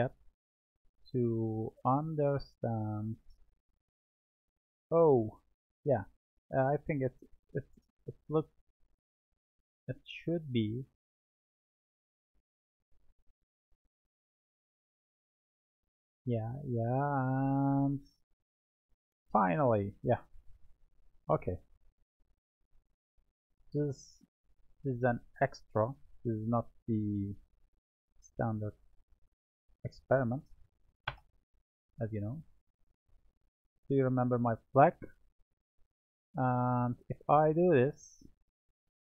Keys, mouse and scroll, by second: 7.0 click, 8.1 click, 9.9-11.4 drag, 12.6 click, 14.3-17.3 drag, 21.7-22.8 drag, 22.8-23.5 middle drag, 23.5-25.0 scroll up 4, 25.0-26.4 scroll up 2, 26.4 Tab, 27.1-28.3 right drag, 29.4-32.3 drag, 32.3 middle click, 33.3-33.6 scroll, 33.6 middle click, 34.9-35.9 middle drag, 36.9-39.0 middle drag.